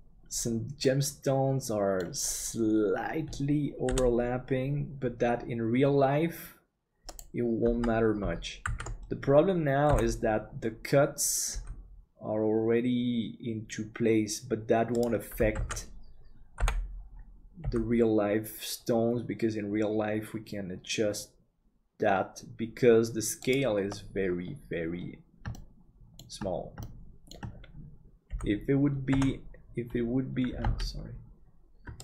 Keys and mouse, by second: 0.8-2.0 middle drag, 3.9 KP_7, 7.7 Tab, 8.6 alt+a, 9.9 l, 11.5 g, 15.6 alt+a, 16.6 l, 17.6 g, 25.6-26.6 shift+middle drag, 26.9 shift+middle click, 28.3 g, 30.7 ctrl+z.